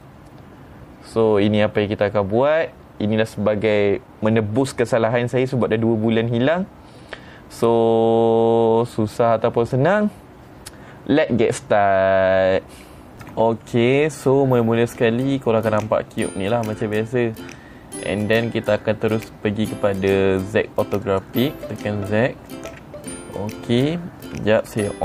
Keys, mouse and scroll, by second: 4.2-6.8 middle drag, 17.0 middle click, 21.5 click.